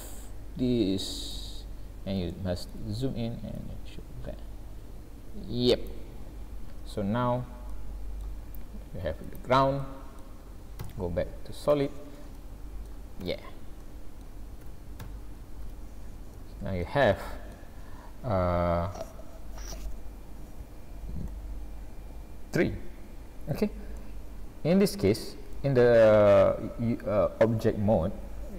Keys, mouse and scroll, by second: 1.5-2.2 scroll up 5, 2.3 shift+middle click, 3.6 click, 6.2-7.0 scroll down 10, 7.7 middle click, 8.4 s, 9.7 scroll down 1, 9.9 middle click, 10.8 z, 12.4 shift+middle click, 13.3 Tab, 13.8 middle click, 14.7 a, 15.0 a, 15.7 alt+a, 16.4 middle click, 17.1 shift+middle click, 21.3 middle click, 25.1 middle click.